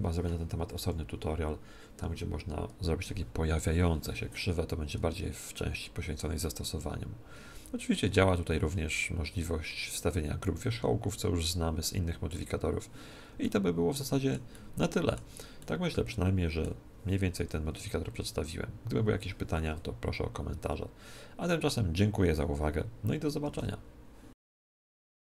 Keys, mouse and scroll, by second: 0.7 KP_1, 6.4-23.5 middle drag.